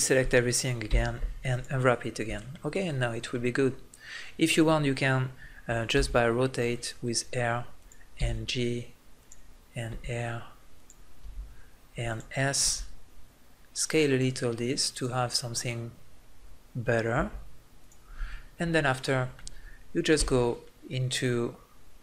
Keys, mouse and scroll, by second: 0.9 u, 5.4 click, 5.9 r, 8.2 g, 9.9 r, 11.2 g, 12.6 s, 14.1 middle click, 17.1 g, 17.9 click, 18.6 ', 20.3 Tab.